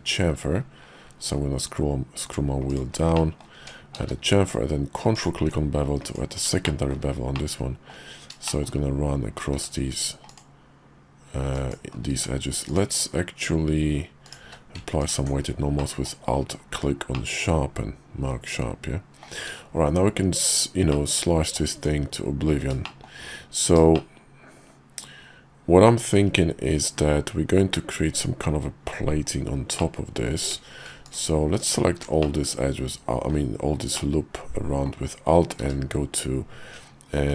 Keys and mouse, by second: 3.1 middle click, 3.6 Tab, 4.0 q, 6.7 shift+middle click, 7.3 middle click, 8.5 shift+middle click, 9.5 q, 12.1 q, 14.4 q, 15.8 middle click, 17.1-19.2 middle drag, 19.4 `, 19.9 KP_5, 20.9 middle click, 21.7 `, 22.8 shift+middle click, 23.9-26.2 shift+middle drag, 29.8 middle click, 30.4 Tab, 31.1 alt+click, 32.2-33.3 drag, 34.0 click, 35.6 q.